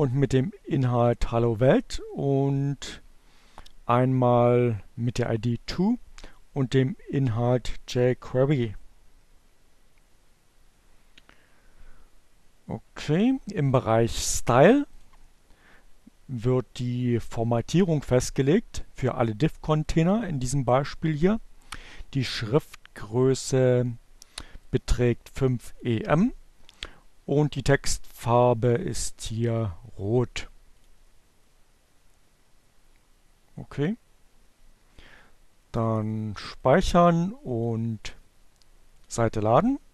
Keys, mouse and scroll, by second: 13.3-14.4 drag, 19.4-20.8 drag, 23.7-25.6 drag, 28.4 click, 28.9-30.4 drag, 35.4 click, 36.4-37.8 drag, 38.2 click, 38.8 click.